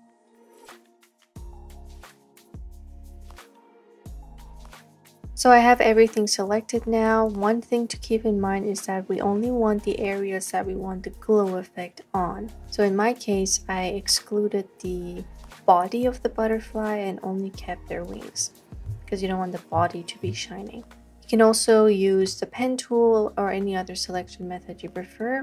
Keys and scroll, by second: 0.0-0.3 typing, 3.3 x, 5.2 space, 5.5 space, 5.5 space.